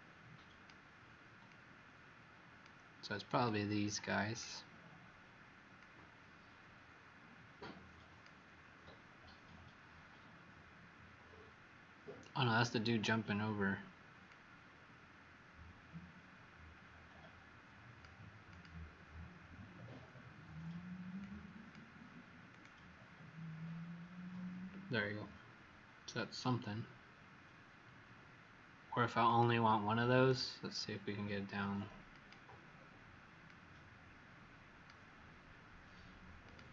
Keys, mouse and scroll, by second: 30.2 right click, 32.0 click.